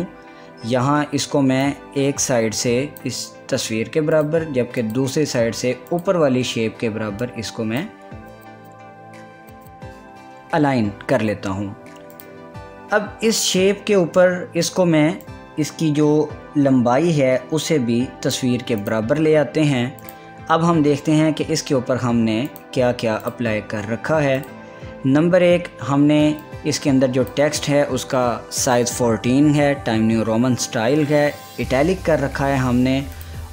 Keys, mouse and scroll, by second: 2.3-9.8 drag, 12.7 click, 16.0-19.4 drag, 23.1 click, 24.0 click, 27.0-30.3 drag.